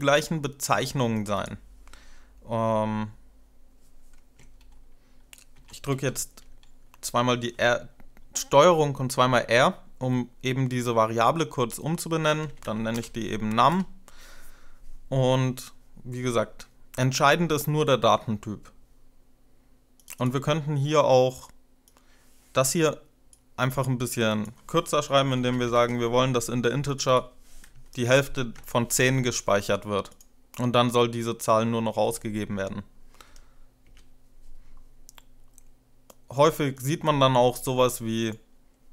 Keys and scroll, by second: 5.3 ctrl+r, 5.7 ctrl+r, 11.8-13.2 typing, 13.6 Return, 23.3 Delete, 24.9-26.0 typing, 28.0-28.8 typing, 31.8 F5, 33.7 Return.